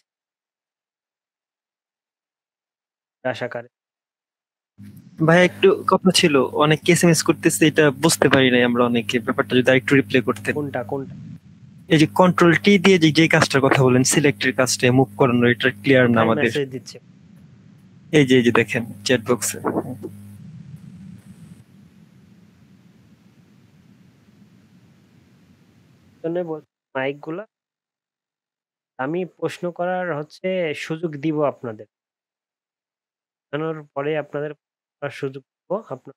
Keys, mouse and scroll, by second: 4.7 ctrl+z, 10.0 alt+scroll down 1, 10.5 alt+scroll up 1.